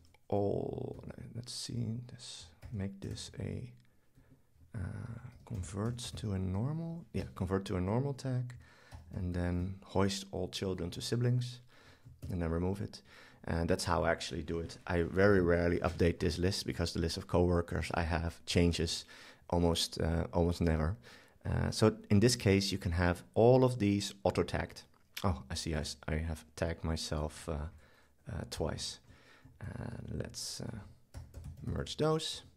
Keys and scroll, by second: 2.6 super+k, 5.3 super+k, 8.9 super+k, 12.2 shift+super+BackSpace, 28.4 shift+super+Up, 31.2 super+k.